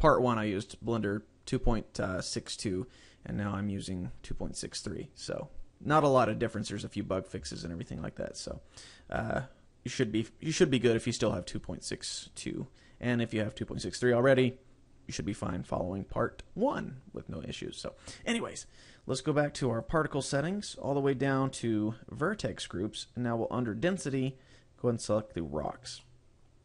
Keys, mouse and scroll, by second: 6.8 middle click, 7.6 shift+middle click, 8.1-8.5 scroll up 2, 8.9 shift+middle click, 9.3 middle click, 20.5 click, 20.5-21.6 scroll down 8, 22.3 click, 22.6-23.0 scroll down 2, 24.1 click, 26.1 middle click.